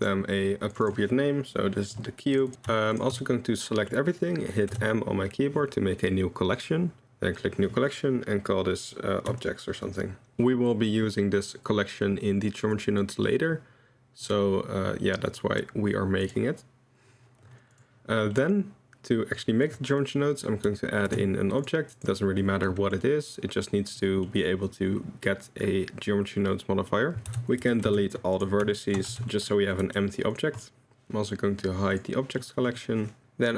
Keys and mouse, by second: 0.7-2.4 drag, 2.9 shift+right click, 3.8 click, 4.7 m, 10.3 Return, 10.3 ctrl+s, 13.1 click, 15.3 click, 16.2 click, 18.3-19.3 middle drag, 19.4 middle drag, 21.1 shift+a, 22.5 middle click, 24.0 middle drag, 26.9 middle drag, 27.6 Tab, 27.6 a, 27.8 x, 28.8 shift+middle drag, 29.1 Tab, 29.3 drag, 29.8 g, 30.6 drag, 31.9 click, 33.2 KP_Decimal.